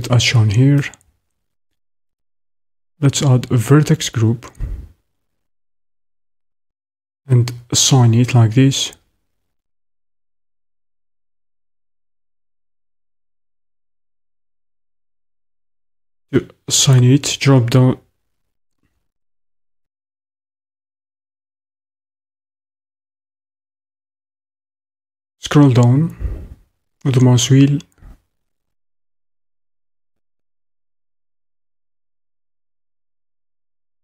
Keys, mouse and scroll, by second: 14.0 ctrl+z.